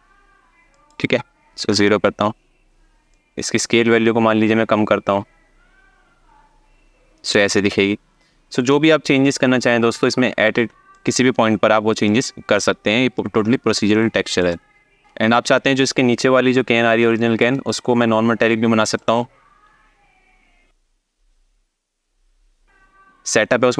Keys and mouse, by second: 0.4-1.5 drag, 2.8-6.9 drag, 8.4-9.6 ctrl+drag, 10.6-11.8 ctrl+drag, 13.6 alt+shift+middle click, 14.9 space, 16.9 alt+shift+middle click, 17.7 click.